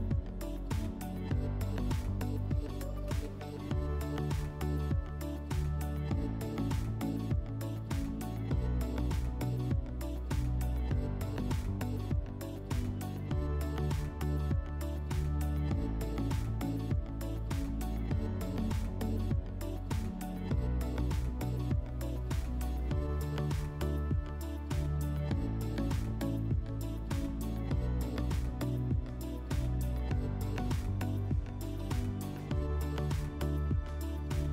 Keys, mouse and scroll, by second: 10.3 click, 16.1 click, 20.9 click, 30.5 click, 32.8 click.